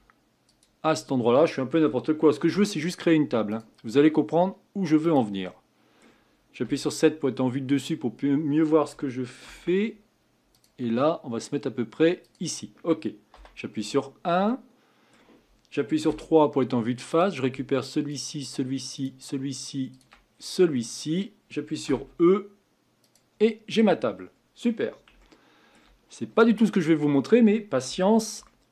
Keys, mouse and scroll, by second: 2.4 ctrl+r, 5.6-6.6 middle drag, 6.6 KP_7, 7.6-9.5 scroll up 4, 9.5 ctrl+r, 13.3 KP_1, 14.5-16.1 middle drag, 16.1 3, 17.1 click, 18.1 shift+click, 18.9 shift+click, 19.9 shift+click, 20.3-20.7 scroll down 6, 20.8-21.8 middle drag, 21.8 e, 23.4 middle click, 23.8-25.2 scroll up 7, 25.2-27.1 shift+middle drag, 27.1-27.9 scroll down 2, 27.9 Tab, 28.4-28.7 shift+middle drag.